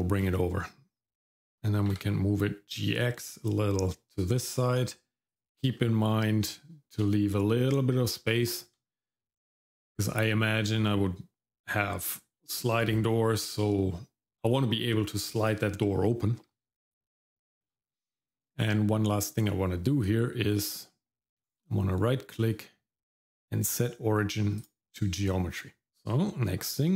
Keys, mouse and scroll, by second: 1.7 g, 5.8 middle click, 8.4 shift+middle click, 17.0 scroll up 1, 17.4 shift+middle click, 21.4-24.7 right drag.